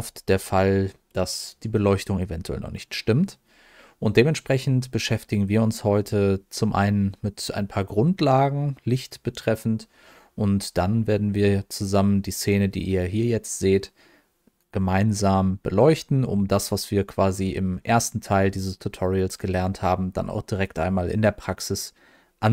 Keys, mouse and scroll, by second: 1.3-1.9 scroll up 1, 1.9 middle click, 2.4-2.9 scroll up 1, 2.9 middle click, 5.4-5.9 scroll down 1, 5.9 middle click, 7.0-7.4 scroll down 1, 7.4 scroll up 1, 8.2 middle click.